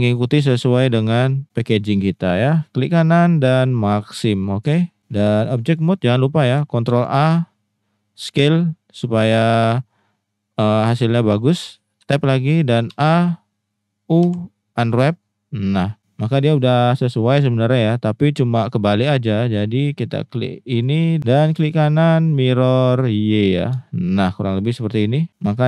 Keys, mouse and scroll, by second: 0.3 middle click, 0.8 middle click, 2.1 middle click, 4.4 middle click, 5.5 click, 6.1 middle drag, 6.9 ctrl+a, 9.0-9.6 drag, 12.0 Tab, 12.9 a, 14.2 u, 20.0 click, 21.2 ctrl+z, 21.8-23.7 drag, 23.8 shift+middle drag, 24.8 shift+middle drag.